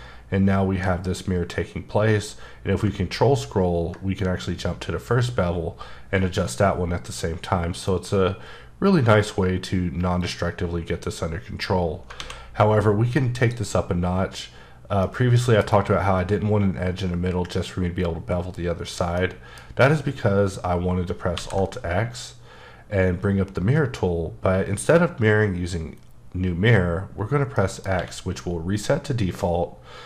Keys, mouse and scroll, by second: 2.8-4.0 ctrl+scroll up 1, 4.0-5.9 scroll up 1, 10.2 click, 12.2 alt+a, 13.4 click, 15.0 middle click, 19.1 middle click, 19.2 middle click, 21.3 alt+x, 27.5 middle click, 27.9 x.